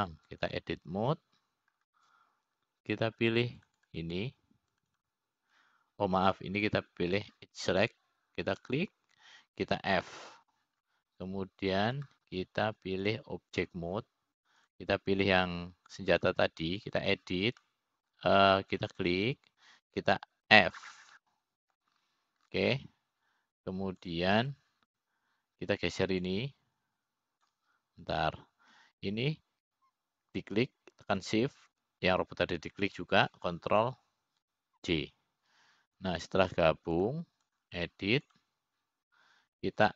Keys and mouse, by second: 0.8 click, 2.5 click, 6.5 click, 7.3 click, 7.7 click, 9.3 click, 11.1 click, 11.4 click, 12.7 f, 13.5-14.5 middle drag, 15.7 click, 17.3 click, 18.8 click, 20.2 middle click, 21.4 click, 21.7 click, 23.2 f, 23.8 middle click, 26.7 click, 28.8-30.2 drag, 30.9 ctrl+z, 33.8 shift+click, 37.6 ctrl+j, 39.7 click.